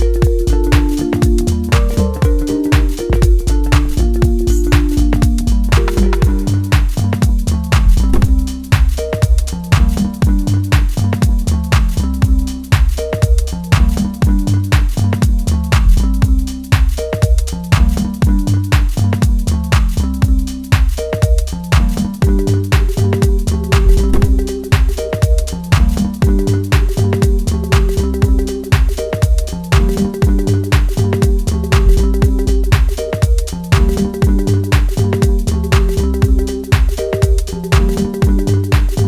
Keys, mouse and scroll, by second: 0.4 click, 3.6-4.3 scroll down 1, 4.3-4.9 scroll up 1, 4.9 click, 6.3 click, 8.1 click, 8.5 click, 9.1 scroll down 1, 9.4 middle click, 10.0 scroll up 3, 10.6 click, 12.6 scroll down 1, 12.7 middle click, 13.5 click, 14.8 middle click, 15.5 click, 16.0 scroll down 1, 16.2 middle click, 17.2 click, 17.7 click, 18.4 click, 18.8 scroll down 1, 19.1 scroll up 2, 19.7 scroll up 1, 20.7 click, 21.7 click, 22.9 click, 23.8 click, 24.4 click, 24.7 middle click, 25.3 ctrl+z, 25.7 click, 26.2 scroll down 3, 26.6-27.0 scroll up 5, 27.0 middle click, 27.3-27.6 scroll down 5, 27.8 shift+middle click, 28.2 scroll down 1, 28.4 middle click, 29.7 scroll up 2, 30.3 click, 33.2 click, 33.5 click, 33.8 click, 34.3 click, 34.6 click, 35.8 middle click, 36.8 click.